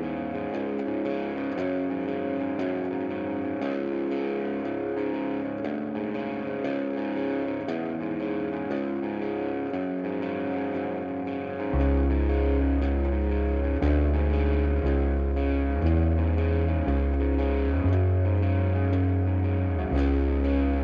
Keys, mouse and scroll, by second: 11.5-13.8 middle drag, 11.9-12.9 scroll up 2, 13.2-13.6 scroll up 2, 13.6 scroll down 2, 13.8 click, 14.4-15.5 scroll down 2, 15.5-17.3 right drag, 16.8 scroll up 2, 17.1 scroll down 2, 17.3-20.4 middle drag, 17.8 scroll down 2, 18.5 scroll down 2, 20.4-20.8 drag.